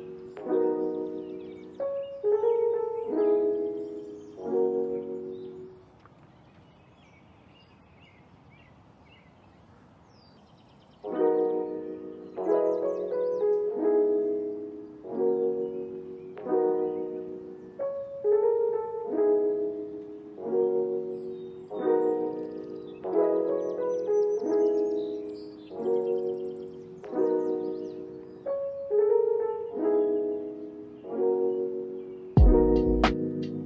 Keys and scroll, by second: 1.1 BackSpace, 1.4 5, 1.5 Return, 2.8 ctrl+a, 5.1 End, 6.1 alt+], 6.5 ctrl+s, 8.4 u, 11.4 End, 11.8 KP_Multiply, 12.1 3, 12.3 Return, 13.4 ctrl+s, 15.7 space, 21.9 space, 22.3 ctrl+s, 30.8 alt+z.